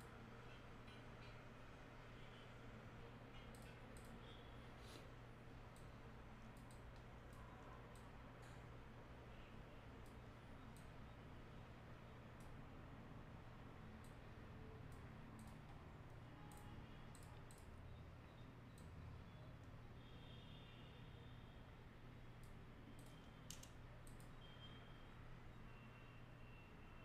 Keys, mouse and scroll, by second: 3.6 click, 5.8-6.7 drag, 14.1-15.0 drag, 18.8-22.5 drag.